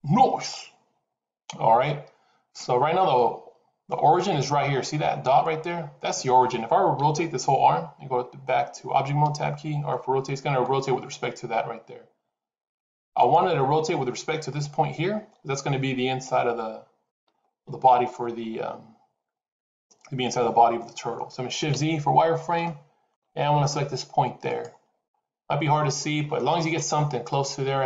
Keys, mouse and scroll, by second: 3.0 middle click, 5.3 middle click, 6.9 KP_7, 9.1 Tab, 11.0 r, 17.0 Tab, 21.6 shift+z, 22.4 shift+middle click, 24.3 click, 24.9-25.3 scroll up 3, 25.7 shift+middle click, 26.6-27.0 scroll up 3, 27.7 middle click.